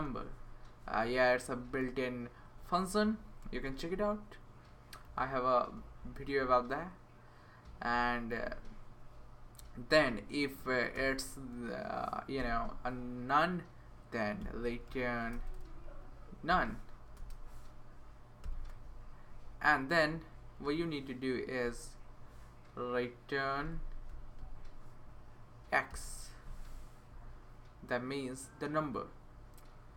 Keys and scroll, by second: 0.0-0.3 typing, 1.0 Left, 1.4 BackSpace, 1.8 a, 2.4 Right, 3.4 (, 5.0 x, 5.8 Right, 6.0 Right, 6.4 Right, 7.6 Right, 7.9 Right, 8.3 Right, 9.8 Right, 10.9 r, 12.4 Return, 14.1-17.1 typing, 18.4 shift+n, 19.1 Right, 19.4 Right, 19.5 Right, 20.0 Tab, 20.6 Return, 21.3-22.3 typing, 23.4 Up, 24.4 Return, 25.9 x.